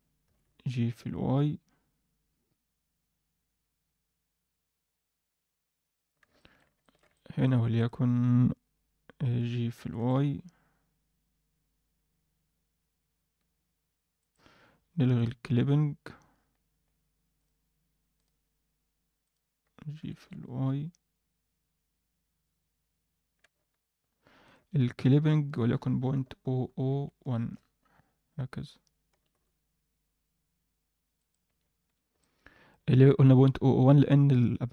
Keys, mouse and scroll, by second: 0.2 g, 6.3 alt+shift+middle click, 6.8 ctrl+middle click, 7.1 middle click, 7.7 click, 8.6 click, 9.7 g, 15.1 click, 16.0-16.7 scroll down 3, 16.3-16.7 scroll up 1, 17.3 click, 17.3 scroll up 2, 18.1 click, 19.2 click, 20.0 g, 25.4-27.5 drag, 26.6 KP_0, 29.1 g, 31.4 Tab, 31.6 scroll down 1, 31.8 Tab, 32.2 alt+middle click.